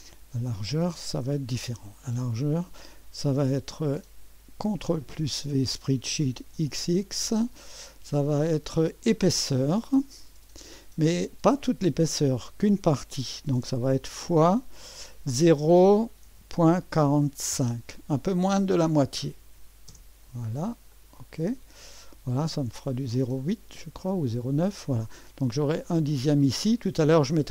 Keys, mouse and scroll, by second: 2.0 click, 3.8 click, 4.6 typing, 5.1 ctrl+v, 6.3-7.0 typing, 10.2 click, 14.2 KP_Multiply, 16.2 KP_Decimal, 16.9 KP_4, 17.5 KP_5, 19.9 Return, 20.9 click, 21.9-23.3 scroll up 1, 23.3-27.5 drag.